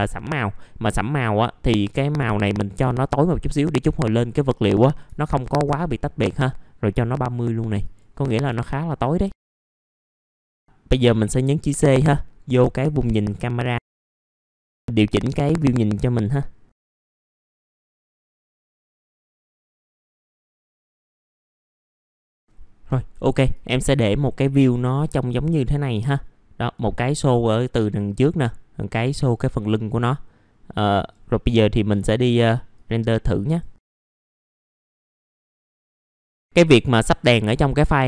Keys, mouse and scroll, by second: 9.1 click, 9.4 scroll down 1, 9.5 alt+middle click, 10.0 scroll down 1, 10.1 alt+middle click, 10.6 click, 13.4 middle click, 15.3 click, 16.7 middle click, 16.8 right click, 16.9 click, 17.3 middle click, 17.5-20.3 typing, 17.7 click, 18.0 middle click, 18.1 click, 18.2 ctrl+z, 18.3 click, 18.6 click, 19.2 middle click, 19.3 shift+click, 19.6 click, 20.2 click, 20.4 click, 20.5 ctrl+z, 20.6 click, 21.0 click, 21.5 middle click, 21.8 click, 22.1 middle click, 23.7 right click, 24.1-27.7 drag, 27.7 click, 32.9 right click, 33.8-38.0 drag.